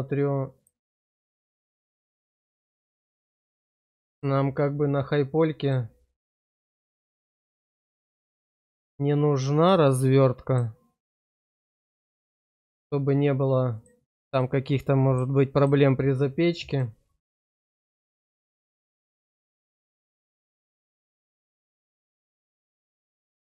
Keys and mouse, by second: 0.5 click, 3.2 middle click, 6.3 middle click, 9.9 middle click, 11.0 click, 12.4 click, 13.7 click, 14.3 middle click, 15.6 click, 16.6 click, 19.5 click, 20.9 click.